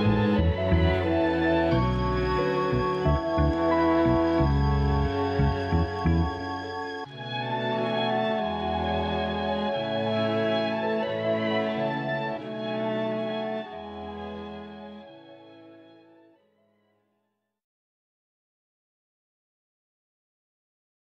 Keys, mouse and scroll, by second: 2.8 click, 5.3 a, 5.5 a, 6.6 scroll up 4, 9.3 click, 13.3 click, 16.1-17.5 drag, 18.4 scroll up 2, 18.7 click.